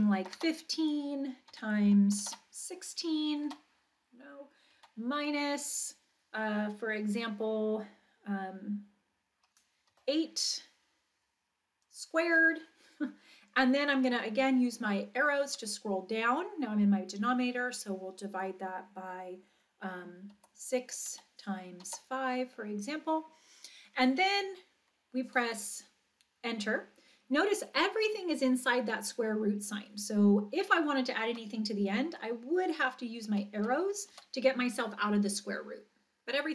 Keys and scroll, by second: 0.0-2.2 typing, 3.5 6, 4.8 -, 9.9 8, 15.5 Down, 20.4 6, 21.8 5, 31.4 Right, 33.6 Right, 34.1 Right.